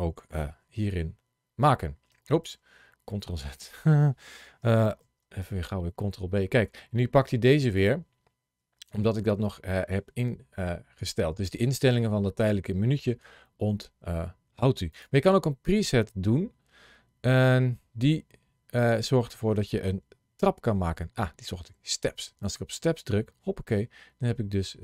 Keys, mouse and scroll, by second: 0.4 ctrl+z, 2.3 ctrl+z, 4.9 ctrl+b, 7.6 click, 14.8 click.